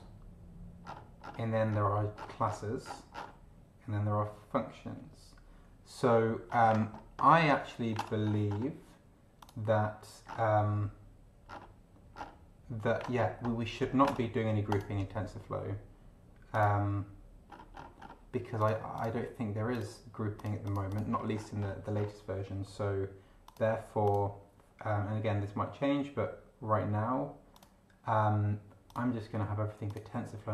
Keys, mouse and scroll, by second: 0.8-2.4 scroll down 8, 2.8-3.4 scroll down 2, 6.4-7.8 scroll up 4, 8.2-8.7 scroll up 2, 9.4 click, 10.2 scroll down 2, 11.4 scroll down 2, 12.1 scroll down 2, 13.2-14.0 scroll up 2, 14.7 click, 16.5 click, 17.5 scroll up 2, 18.6 click, 18.9 click, 19.7 click, 20.3 click, 21.1-21.5 scroll up 1, 21.9 scroll up 1, 23.4 click, 24.0 click, 27.5 click, 28.9 click, 29.9 click.